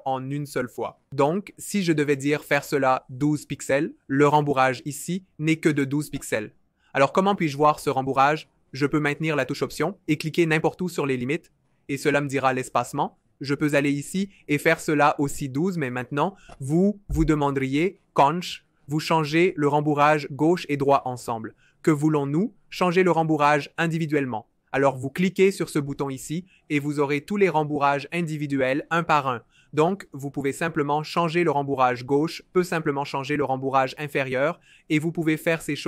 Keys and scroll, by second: 2.2 typing, 3.5 typing, 3.6 Return, 15.7-16.6 typing, 17.7 typing, 29.9 shift+Up, 30.0 shift+Up, 30.2 shift+Up, 32.6 shift+Up, 32.8 shift+Up, 33.0 shift+Up.